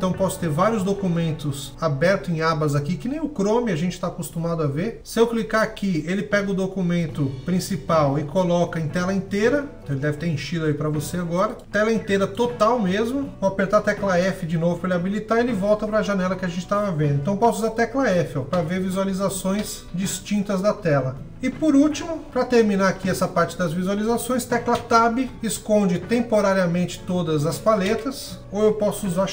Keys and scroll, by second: 19.3 f, 24.4 Tab.